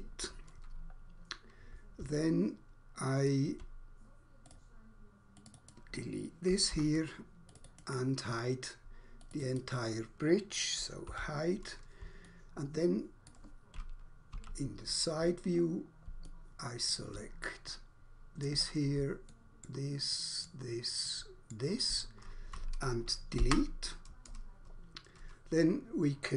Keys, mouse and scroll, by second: 0.9 scroll down 1, 1.6-1.9 scroll up 1, 2.1 alt+click, 5.4 click, 5.6 click, 5.8 click, 6.8 Delete, 7.4 click, 7.6 click, 9.2 click, 9.4 click, 11.1 h, 12.2 alt+click, 14.1 2, 15.6 scroll down 1, 16.2 alt+click, 17.8 middle click, 18.4 middle click, 19.2 shift+middle click, 20.1 shift+middle click, 21.1 shift+middle click, 23.4 Delete.